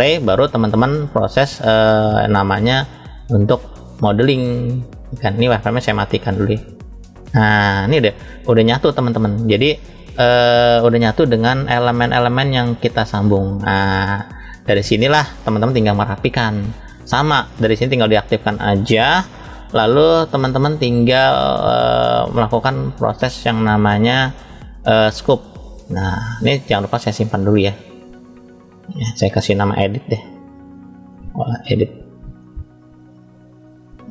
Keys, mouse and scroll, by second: 1.9 click, 5.6-7.0 drag, 7.7-8.7 middle drag, 9.0 scroll up 1, 10.0-10.8 middle drag, 10.0 scroll up 1, 15.7 scroll down 1, 17.3 click, 17.3 scroll down 2, 17.7 click, 19.0-20.3 shift+middle drag, 21.1-25.5 drag, 26.9-28.2 drag.